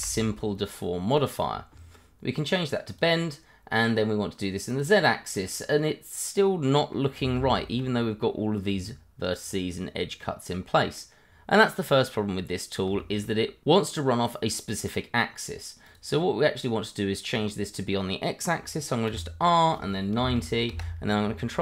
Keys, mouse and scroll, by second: 1.1 click, 1.9 scroll up 1, 3.0 click, 3.7 middle click, 4.7 click, 5.5 middle click, 7.0 scroll up 1, 7.3 Tab, 9.7-10.2 scroll down 1, 10.2 middle click, 11.2-11.5 scroll down 1, 11.5 middle click, 12.1 scroll up 1, 13.0 shift+middle click, 13.0 middle click, 13.2 shift+middle click, 15.8 click, 16.7 scroll up 1, 19.1 r, 20.1 9, 20.7 Return, 21.5 ctrl+a.